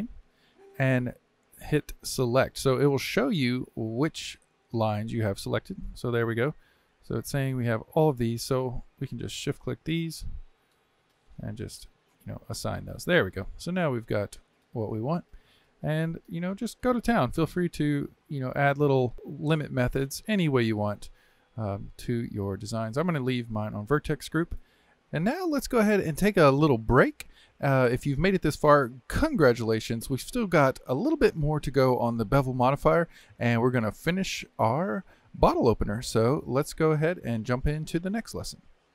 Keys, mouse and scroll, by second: 0.0-3.0 drag, 5.4-6.9 drag, 6.9-9.1 middle drag, 9.1 click, 10.1 shift+click, 12.2 click, 13.0-19.1 middle drag, 19.1 click, 19.9-23.1 drag.